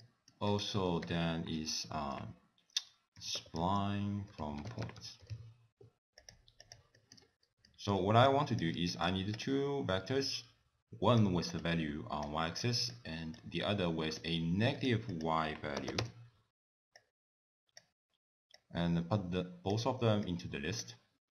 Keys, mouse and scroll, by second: 0.0 middle click, 0.5 click, 1.0 ctrl+a, 6.9 middle click, 7.2-8.3 scroll down 4, 7.7 middle click, 8.3 click, 8.9 shift+d, 10.2 click, 11.6 click, 12.6 click, 13.3 click, 14.7 click, 15.1 click, 17.0 click, 18.6 click, 20.3 click.